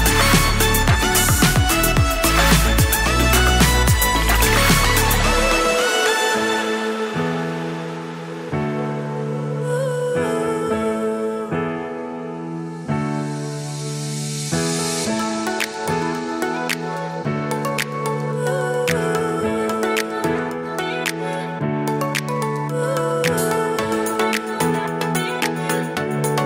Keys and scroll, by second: 9.6 super+s, 14.9 super+s, 21.7 super+s, 22.8 super+s, 24.9 super+s.